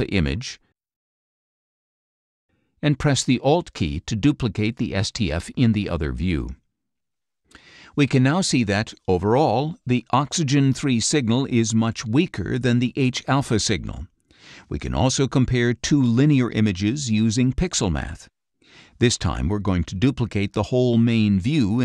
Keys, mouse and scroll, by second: 0.7 middle click, 6.6 alt+scroll up 2, 6.8 alt+middle click, 10.9 click, 12.6 click, 19.1-20.4 drag, 20.8 click, 21.4-21.8 scroll up 4.